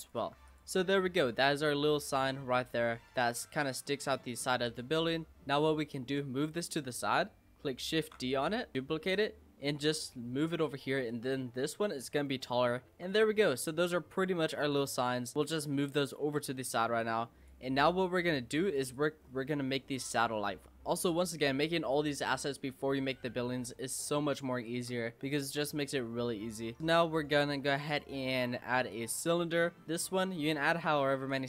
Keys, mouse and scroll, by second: 0.2 Tab, 0.5 click, 0.8 scroll down 5, 0.9-2.5 middle drag, 2.5-2.8 scroll up 5, 2.8 middle drag, 3.1-3.8 scroll down 6, 3.8-4.3 middle drag, 4.3-4.6 scroll up 1, 4.6 click, 4.9 scroll down 3, 5.1-5.5 middle drag, 5.5-6.1 scroll up 1, 6.1 click, 8.0 shift+d, 8.7 click, 9.8 Tab, 11.1 click, 11.5-11.9 scroll down 4, 11.9-12.9 scroll up 8, 12.9 Tab, 13.1 click, 13.4 scroll down 3, 13.6-14.6 middle drag, 14.6 click, 15.4 click, 16.0 shift+click, 17.0 click, 17.9 scroll down 3, 18.5 click, 18.9 click, 19.2-19.8 scroll down 4, 19.8-20.1 scroll up 4, 20.1 click, 20.4 scroll up 3, 20.6-21.3 middle drag, 21.3-22.0 scroll down 3, 22.0 scroll up 1, 22.3-23.9 middle drag, 23.9-24.7 scroll up 3, 24.7 shift+a, 29.6 middle click, 30.0-31.4 drag.